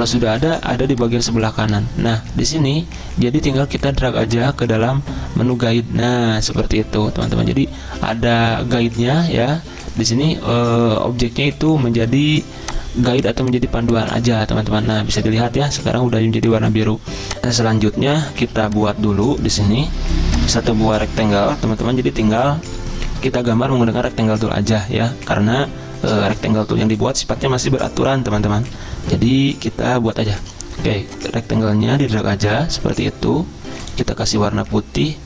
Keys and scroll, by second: 15.0 ctrl+z, 17.4 alt+Tab, 18.4 z.